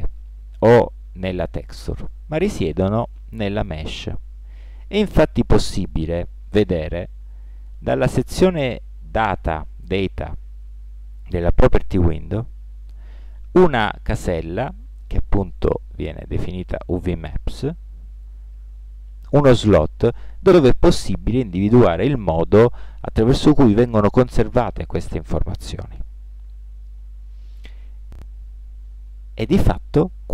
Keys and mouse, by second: 2.8 Tab, 3.1-5.0 right drag, 7.7-9.8 middle drag, 11.9-13.6 drag, 15.7-17.5 drag, 26.3 Tab.